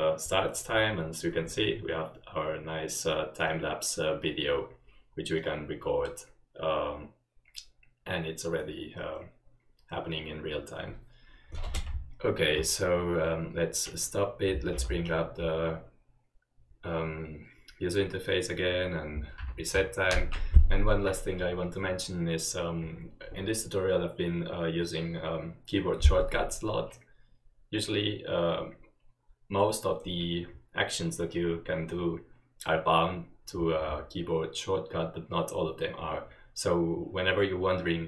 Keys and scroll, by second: 14.9 ctrl+u, 19.5 ctrl+r.